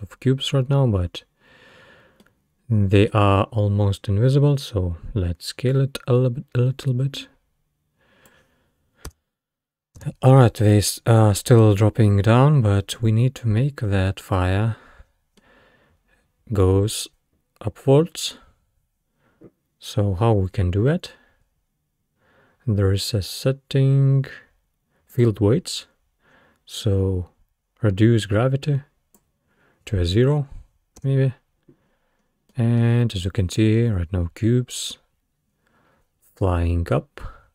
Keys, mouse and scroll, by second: 1.6-2.2 scroll up 1, 2.2-5.2 middle drag, 5.7-8.7 drag, 9.1 space, 10.0 space, 14.1-17.2 middle drag, 20.5-21.4 scroll down 5, 21.4-22.9 scroll down 7, 25.1-29.9 drag, 30.4-31.0 scroll down 3, 31.0 space, 31.9-32.5 scroll down 4, 32.5-33.4 middle drag, 33.4-34.2 scroll up 5, 35.5-36.2 scroll down 2, 36.2-37.1 scroll up 1.